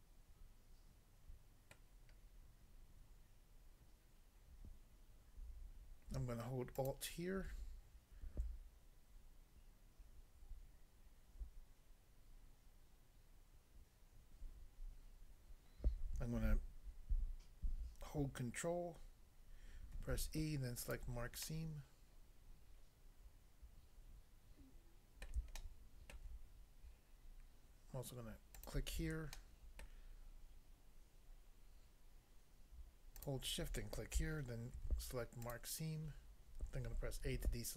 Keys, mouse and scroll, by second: 1.8 middle click, 6.8 alt+click, 20.0 ctrl+e, 20.8 click, 21.4 middle click, 25.2 middle click, 25.6 shift+middle click, 26.4 scroll up 1, 28.6 click, 28.7 click, 29.3 shift+middle click, 33.2 shift+click, 34.7 ctrl+e, 35.5 click, 37.2 a.